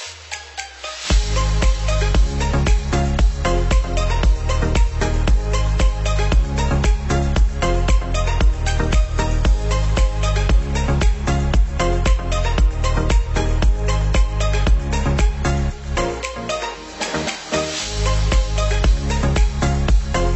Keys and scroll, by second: 0.9 ctrl+=, 7.7 ctrl+0.